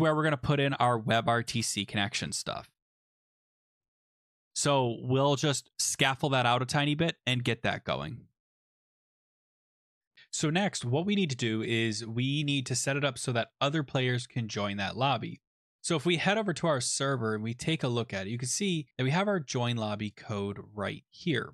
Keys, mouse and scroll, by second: 0.4 click, 1.1 Return, 1.5-4.3 typing, 4.4 middle click, 4.8 scroll, 6.0 click, 8.0 click, 8.9 click, 15.4 click, 16.0 click, 16.8-17.8 scroll, 17.8-18.6 scroll, 18.6 scroll.